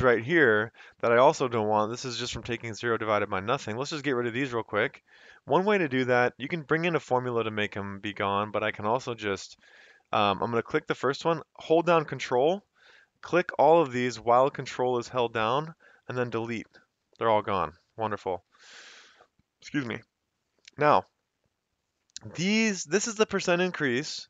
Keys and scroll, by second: 2.5 F2, 3.3 Escape, 16.6 Delete, 18.5 Escape, 23.0 F2, 23.7 Escape.